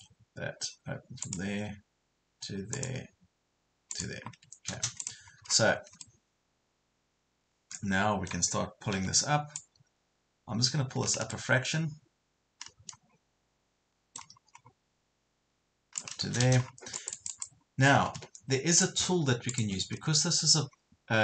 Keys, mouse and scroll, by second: 4.3 Escape, 5.0 click, 5.5 scroll down 1, 6.0-8.5 middle drag, 8.9 p, 9.6 click, 11.3-16.5 middle drag, 16.5 space, 16.7 scroll down 1, 16.9 click, 18.0 Escape, 18.7-21.2 drag.